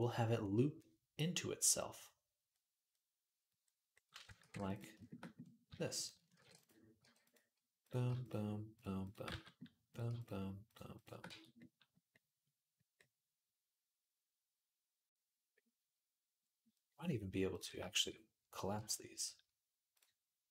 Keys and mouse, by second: 4.2 ctrl+r, 5.4 s, 6.2 ctrl+r, 6.8 g, 8.5 shift+click, 8.6-9.7 shift+middle drag, 9.1 f, 9.7 click, 10.0 click, 10.8 click, 11.1 f, 12.2-17.7 middle drag, 17.7 shift+click, 17.8-20.3 shift+middle drag, 20.3 click, 20.3 m, 20.4-20.5 shift+middle drag.